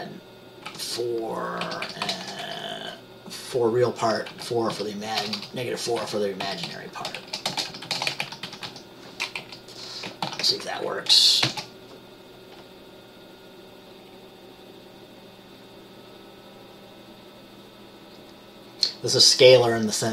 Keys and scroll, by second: 0.8-2.5 typing, 4.4-9.5 typing, 10.4 ctrl+s, 11.6 ctrl+b.